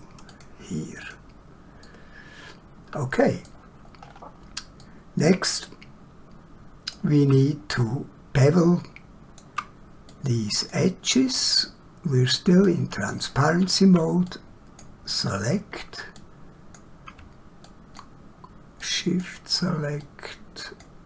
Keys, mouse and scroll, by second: 0.3 click, 1.8 middle click, 4.0 scroll down 1, 4.8 shift+middle click, 7.7 scroll up 1, 8.6 shift+middle click, 10.1 click, 11.5 middle click, 13.1 shift+middle click, 14.3 click.